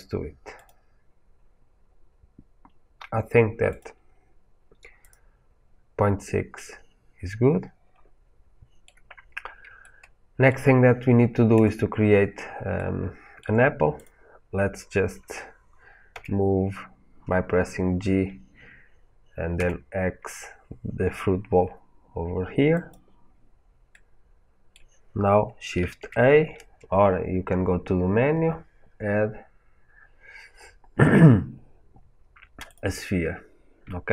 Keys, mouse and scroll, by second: 0.5-1.7 drag, 3.6 click, 4.9 click, 6.5-11.5 middle drag, 11.5 click, 12.7-13.9 shift+middle drag, 13.9-16.0 drag, 16.0 g, 22.8 click, 23.8-34.1 middle drag, 25.7 shift+a.